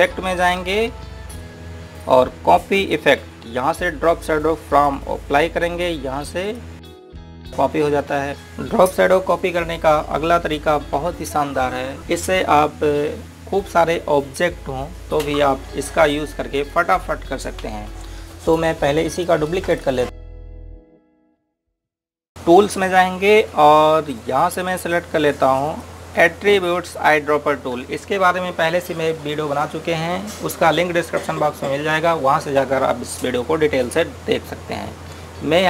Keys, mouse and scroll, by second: 5.8 click, 20.0 click, 20.2 right click, 20.8 click, 20.9 right click, 21.0 click.